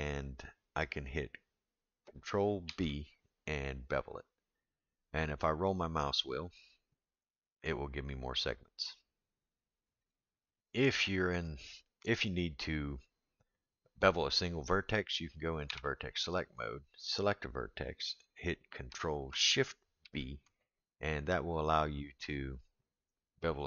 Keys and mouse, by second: 2.7 ctrl+b, 10.8-12.6 middle drag, 15.7 1.